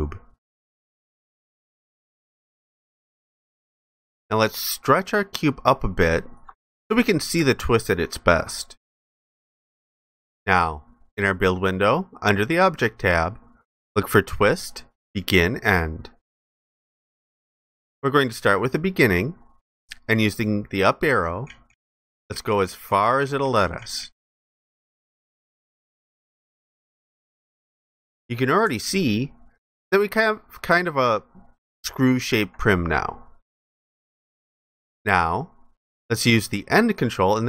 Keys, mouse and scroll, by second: 1.9 alt+click, 5.0 ctrl+shift+click, 7.4 alt+click, 28.8 ctrl+alt+click.